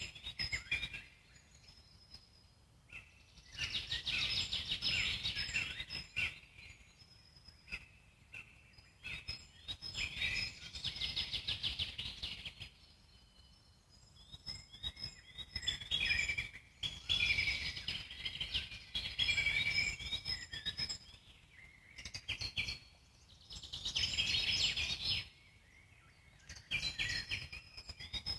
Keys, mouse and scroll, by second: 0.6 ctrl+z, 1.3 shift+click, 2.1 alt+middle click, 3.0 shift+click, 3.5-5.6 alt+middle drag, 5.6 shift+click, 6.0-7.4 alt+middle drag, 7.4 shift+click, 7.9-9.3 middle drag, 9.3 z, 10.6 z, 11.5 ctrl+click, 14.4 alt+middle click, 15.2-15.6 scroll down 1, 15.6-16.6 alt+middle drag, 16.6 g, 18.1-20.1 alt+middle drag, 20.1 e, 22.1 alt+middle click, 22.7 s, 25.4-27.4 drag, 27.4-28.3 alt+middle drag.